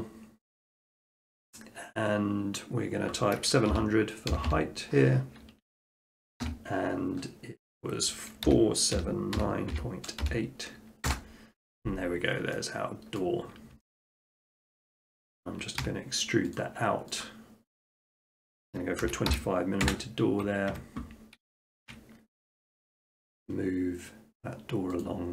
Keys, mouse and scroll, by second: 3.7-4.3 typing, 6.4 click, 8.5-10.2 typing, 11.1 Return, 13.2 middle click, 13.6 middle click, 13.8 shift+middle click, 13.9 scroll, 14.2 shift+middle click, 14.5 middle click, 14.7 middle click, 14.8 shift+middle click, 15.0-15.4 scroll, 15.8 e, 16.6 click, 17.2 click, 19.0 typing, 19.9 Return, 20.7 Tab, 21.7 shift+middle click, 22.9 click, 23.4 middle click, 23.7 middle click, 23.8 middle click, 24.5 scroll, 25.0 click.